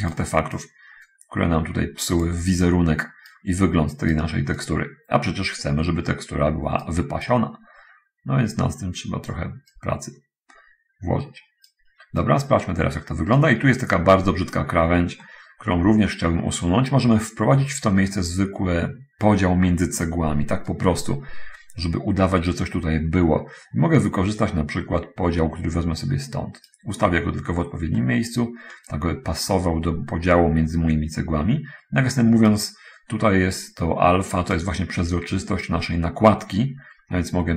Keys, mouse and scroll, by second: 0.8-2.6 drag, 2.6-3.8 right drag, 4.0 right click, 4.8-6.9 right drag, 7.1-9.7 drag, 10.0-12.0 right drag, 12.4-13.8 right drag, 14.6 scroll up 1, 15.4-17.2 middle drag, 20.6-26.9 right drag, 27.4-27.8 scroll up 1, 28.0 middle click, 29.2-32.6 right drag, 34.8-37.5 drag.